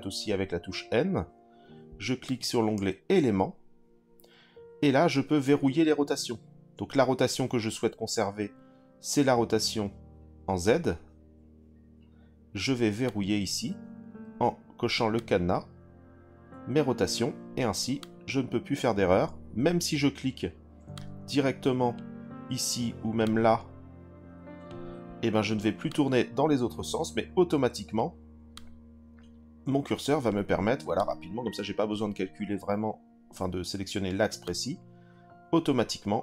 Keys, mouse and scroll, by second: 13.0 click, 15.1 click, 18.0 click, 20.9 click, 23.2 click, 25.8 click, 28.5 click, 30.9 click, 34.4 click.